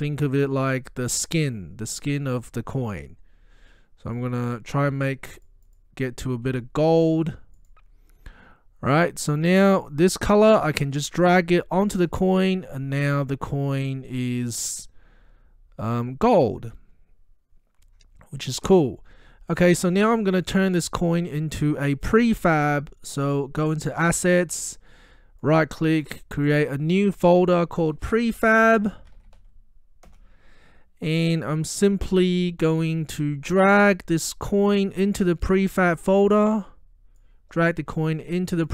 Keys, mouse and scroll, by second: 0.6-2.2 drag, 9.9-12.2 drag, 15.8 scroll up 1, 24.3 click, 25.4 right click, 26.5 click, 28.4-29.9 typing, 30.1 Return, 35.1-38.7 drag.